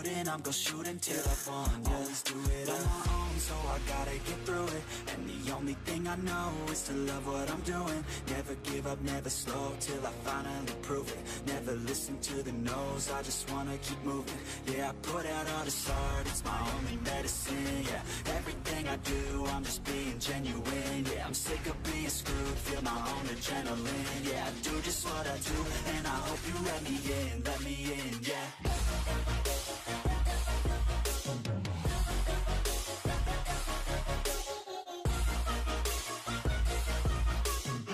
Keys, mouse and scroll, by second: 0.3 click, 0.5 Tab, 0.8 shift+middle click, 1.1 scroll down 4, 1.3-2.6 shift+middle drag, 2.6 click, 3.3 Tab, 3.5 click, 4.4 click, 4.8 shift+a, 6.4-7.4 drag, 7.8 r, 8.7 s, 9.3 s, 9.6 g, 10.2 shift+middle click, 10.6 scroll up 8, 10.8 shift+middle click, 11.0 scroll down 1, 11.2 s, 11.8 click, 11.9 shift+middle click, 12.2 s, 13.1 g, 14.9 shift+middle click, 15.4 g, 16.7 1, 16.8 click, 17.5 g, 19.0 e, 21.1-24.0 typing, 25.1 e, 25.5 s, 26.5 click, 26.9 click, 27.2 scroll down 2, 27.8 ctrl+l, 28.0 scroll down 3, 28.3 ctrl+l, 28.7 scroll up 2, 28.9 s, 30.3 g, 31.6 click, 32.1 ctrl+r, 33.0 click, 33.4 a, 33.5 3, 33.6-33.9 right drag, 33.9 click, 34.0 scroll down 2, 34.2 middle click, 34.6-35.1 middle drag, 35.1-35.4 scroll up 2, 35.4 ctrl+r, 36.5 middle drag, 36.7 scroll up 1, 37.0 ctrl+b.